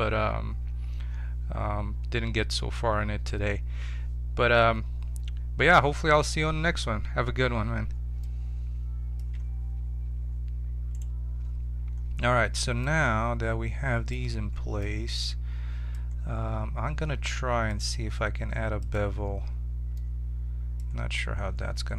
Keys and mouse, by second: 8.2 middle click, 10.9-13.1 right drag, 17.6-19.9 drag, 20.5-21.9 middle drag.